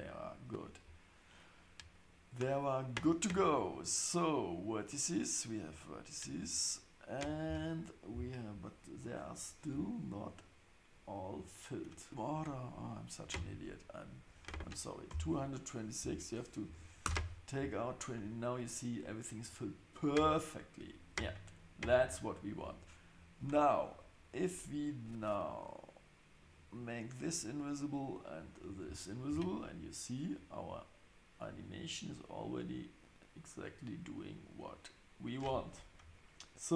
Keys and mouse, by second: 12.3 click, 14.3-17.6 drag, 15.2 KP_2, 26.4 click, 28.5 click, 29.3 space.